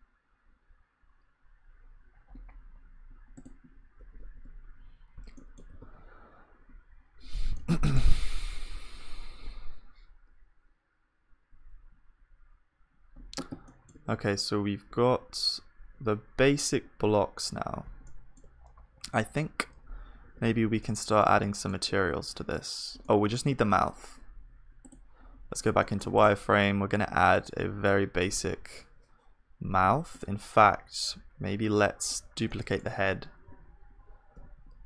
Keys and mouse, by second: 3.4 click, 4.4 KP_1, 5.8 ctrl+s, 15.1 KP_1, 18.0-20.2 middle drag, 20.2 ctrl+s, 20.8-25.4 middle drag, 23.8 KP_1, 25.0-28.6 drag, 25.0 right click, 25.9-28.6 right drag, 26.4 shift+a, 30.7-32.5 drag, 30.7-32.5 right drag, 30.7 z, 32.5 middle click, 33.0 shift+d.